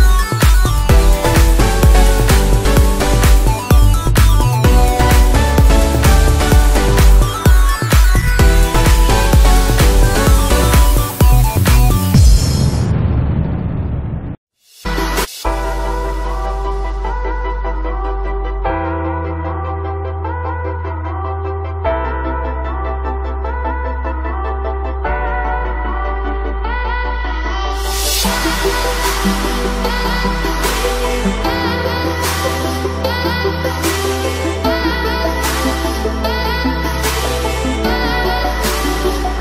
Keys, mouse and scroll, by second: 0.0 alt+click, 2.1-3.3 typing, 3.8-6.5 drag, 6.8 space, 7.2 click, 14.6-15.7 typing, 16.3-18.7 drag, 18.8 ctrl+z, 19.6 space, 19.9 ctrl+click, 21.0 typing, 21.9 click, 23.5 space, 24.4 alt+click, 26.8 typing, 27.4 click, 31.5 click, 31.9 right click, 32.3 click, 35.0 click, 35.3 right click, 36.0 click, 37.2-37.9 typing, 38.9 click.